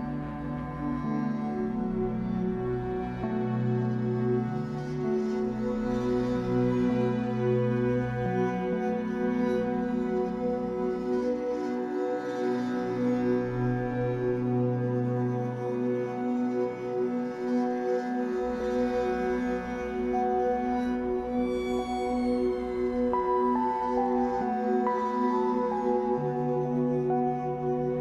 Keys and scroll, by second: 2.3 shift+Up, 3.3 w, 9.9 ctrl+z, 10.9 Escape, 13.3 shift+Up, 14.0 w, 19.5 Escape, 21.8 Escape.